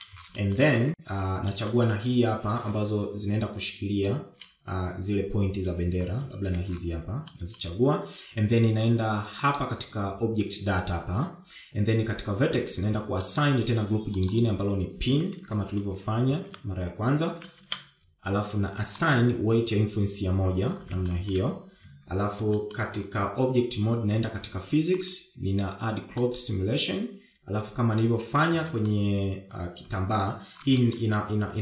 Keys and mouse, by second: 0.8 shift+middle click, 1.5 shift+middle click, 2.1 shift+middle click, 3.3 shift+middle click, 4.7-5.9 shift+drag, 8.0 shift+click, 9.2 shift+middle click, 11.3 click, 15.2 click, 16.0 click, 16.2-20.2 drag, 18.3 BackSpace, 20.9 click, 22.9 shift+middle click, 23.7 Tab, 24.4 shift+middle click, 26.9 click, 28.4 click, 30.6 shift+middle click.